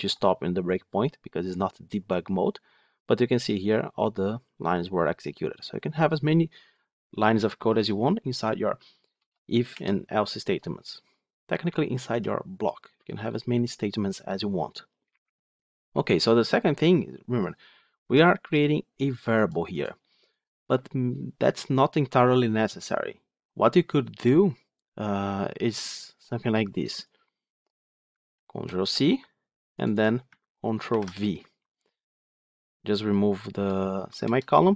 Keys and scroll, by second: 28.2 ctrl+c, 30.7 ctrl+v.